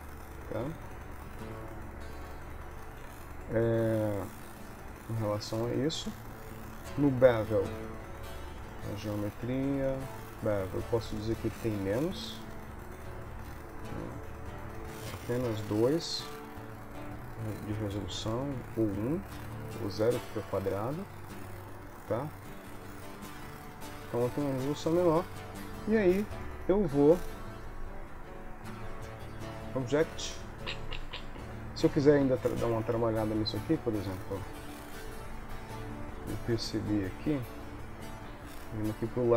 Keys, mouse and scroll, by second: 3.8 middle click, 4.9 middle click, 7.2 middle click, 10.0 middle click, 11.4 click, 11.8 click, 14.9 ctrl+middle click, 17.3 click, 19.1 click, 23.2 click, 24.0 middle click, 24.7 middle click, 25.9 KP_3, 27.0 KP_1, 29.6 click, 32.3 Tab, 34.6 click, 35.6 KP_3, 36.6 KP_1, 38.4 KP_3.